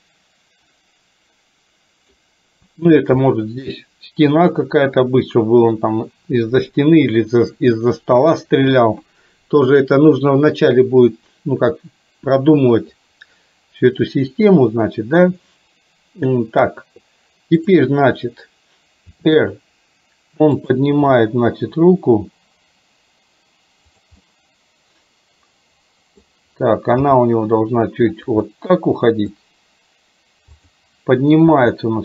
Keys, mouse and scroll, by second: 3.3-4.4 middle drag, 17.8 click, 19.3 r, 21.0 g, 24.3-26.3 middle drag, 27.2 g, 28.5-29.5 middle drag, 29.4 scroll down 1, 30.8 click, 31.5 r.